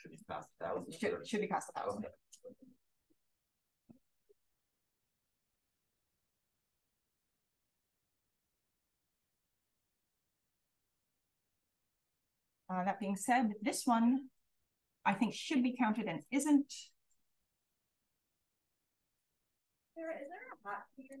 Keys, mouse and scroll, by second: 2.0 BackSpace, 3.3-4.4 typing, 5.4-5.7 drag, 5.7-6.5 scroll down 1, 6.5-7.5 drag, 6.5-7.5 scroll down 1, 7.5-8.4 scroll down 1, 8.4-9.9 scroll down 1, 8.4 d, 8.7 d, 9.0-9.9 drag, 9.9-10.6 scroll down 1, 10.6-11.5 scroll down 1, 11.0 d, 11.5-12.8 scroll up 1, 12.9 click, 13.1 click, 14.8 d, 15.1 click, 15.4 click, 15.8 click, 16.0 click, 17.7-21.0 drag, 17.7-21.2 scroll up 1.